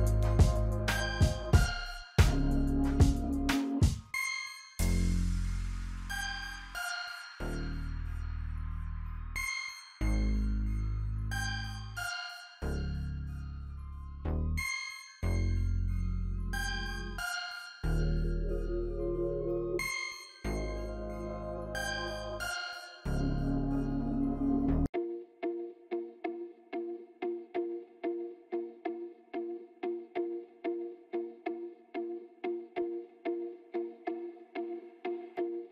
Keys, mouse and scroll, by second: 5.8 click, 5.9 F9, 7.0 click, 8.1 click, 9.8-13.9 drag, 13.9-19.3 drag, 19.8-22.7 drag, 22.8 click, 24.7 scroll up 2, 25.2 space, 25.3 click, 25.5 space, 26.9-34.0 drag, 34.3 scroll up 1, 34.9 scroll up 2, 35.6 alt+scroll down 1.